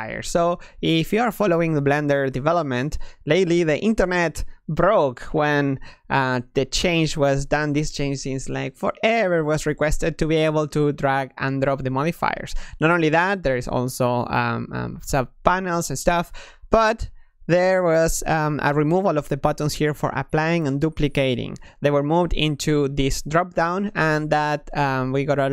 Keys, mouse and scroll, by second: 3.1 click, 3.9-6.9 drag, 6.9-10.3 middle drag, 10.7-11.5 drag, 13.5-17.6 drag, 22.4-24.9 drag.